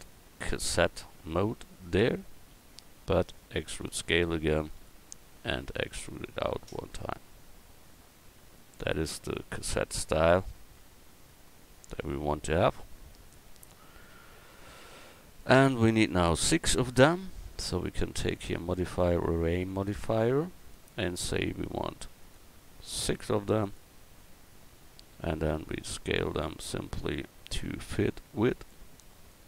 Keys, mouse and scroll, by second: 2.0 Tab, 3.6 e, 5.5 e, 6.9-8.5 drag, 8.7 Tab, 16.0 KP_1, 19.3-21.7 drag, 25.5 s, 27.2 s, 29.3-29.4 drag.